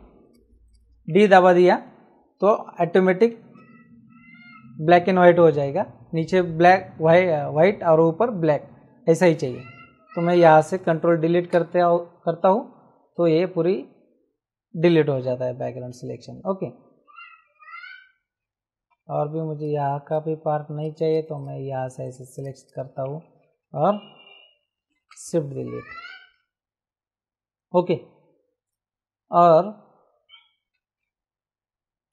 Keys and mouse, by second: 0.2 click, 1.1 Return, 3.6 d, 11.3 Delete, 15.7 ctrl+d, 18.9 p, 19.6 click, 23.1 ctrl+shift+Return, 25.0 Delete, 26.1 ctrl+d.